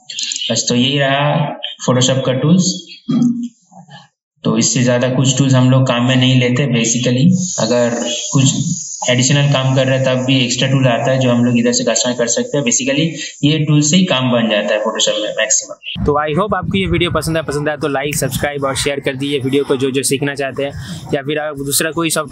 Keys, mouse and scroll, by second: 0.3 click.